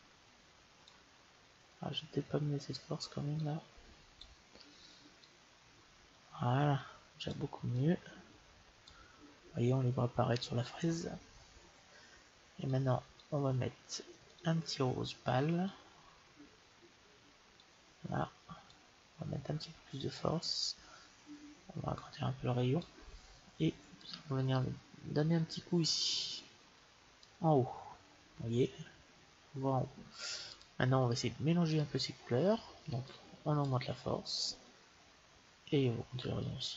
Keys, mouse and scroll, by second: 3.2-6.9 drag, 7.6-9.4 drag, 12.7-17.4 drag, 18.5-20.3 drag, 21.8-23.6 drag, 23.9-25.6 drag, 30.3-32.2 drag, 32.9-34.8 drag, 36.3-36.7 drag.